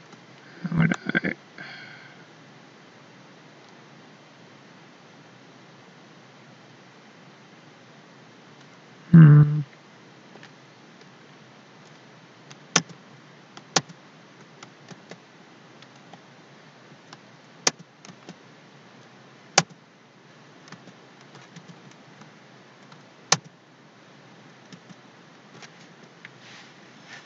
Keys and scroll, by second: 12.8 alt+k, 13.8 ctrl+k, 15.9 ctrl+z, 17.6 ctrl+k, 19.5 ctrl+k, 21.5 alt+k, 23.3 ctrl+shift+k, 24.8 ctrl+shift+d.